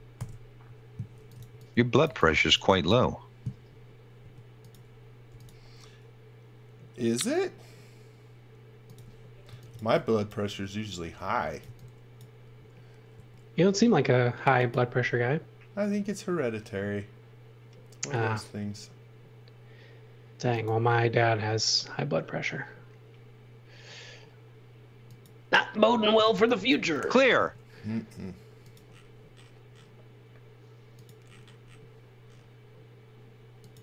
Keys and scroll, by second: 0.1-2.5 typing, 4.2 space, 5.3 m, 9.2-13.1 typing, 25.9-27.3 typing.